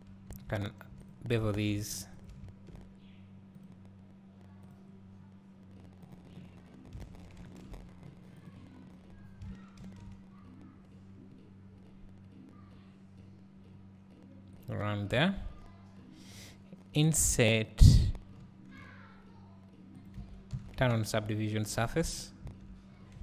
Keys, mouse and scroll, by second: 0.3 Tab, 1.1 click, 2.3 shift+click, 9.8 ctrl+shift+b, 15.2 a, 16.1-18.5 scroll up 2, 18.5 i, 20.1 click, 20.2 a, 20.5 Tab, 22.0 Tab.